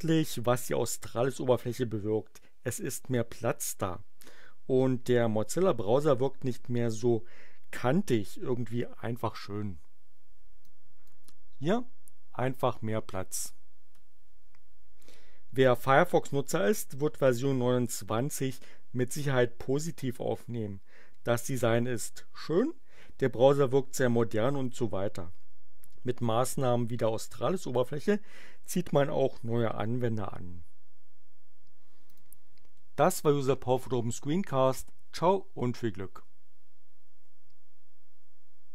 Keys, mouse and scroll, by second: 10.6 click, 32.1 click.